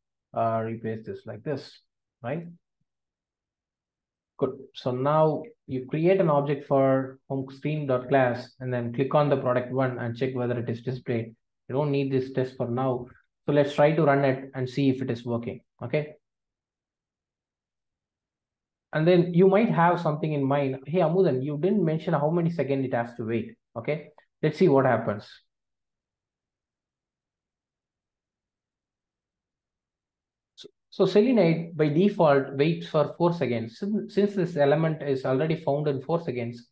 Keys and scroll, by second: 0.8 super+x, 2.3 super+v, 3.6 super+BackSpace.